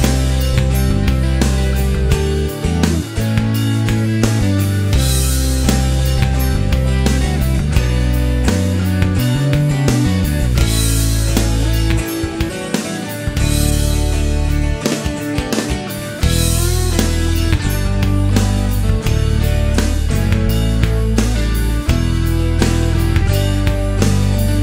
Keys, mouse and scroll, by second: 0.5 click, 1.3 click, 3.7 click, 4.5 click, 4.8 middle click, 6.9 click, 8.0 click, 8.4 middle click, 10.1 click, 11.2 click, 13.5 click, 14.1 click, 14.5 middle click, 17.4 click, 17.8 click, 18.3 scroll down 1, 18.5 middle click, 20.7 right click, 21.7 click, 22.8 click.